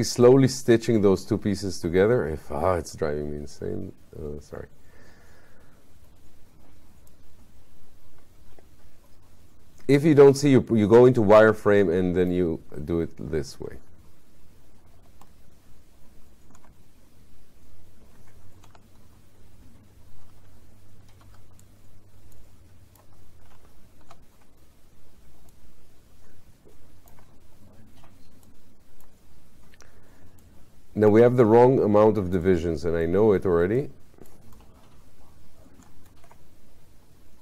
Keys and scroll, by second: 18.7 5, 21.3 4, 24.1 5.